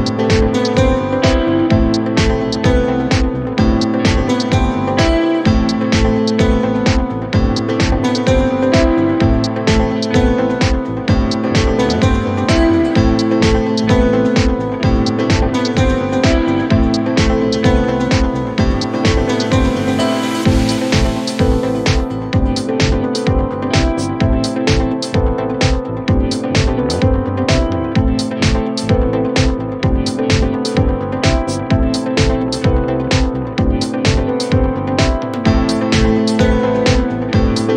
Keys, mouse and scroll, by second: 0.1 shift+middle click, 0.4-1.7 scroll up 2, 1.7 s, 3.8 scroll down 2, 4.0 middle click, 4.8 s, 12.5 KP_1, 12.8 scroll up 2, 13.3 Tab, 15.1 z, 16.8 z, 19.4 e, 24.9 g, 26.6 scroll down 2, 26.8 middle click, 27.2 z, 27.7 Tab, 28.0 middle click, 29.9-30.5 drag, 30.5 KP_1, 30.9-32.5 scroll up 4, 32.5 Tab, 33.7 z, 35.1-36.3 scroll up 1, 36.3-37.3 shift+middle drag, 37.3 click.